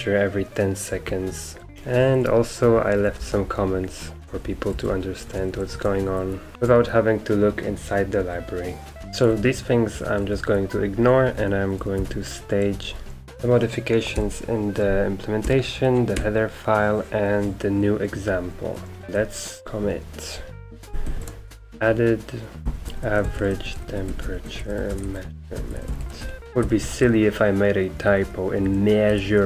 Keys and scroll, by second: 1.7 Escape, 2.7-16.1 typing, 18.8-26.7 typing, 26.7 ctrl+Left, 26.8 ctrl+Left, 27.0 ctrl+Left, 27.9 Right, 28.1 Right, 28.2 Right, 28.6 Left, 29.1 Right, 29.3 Right.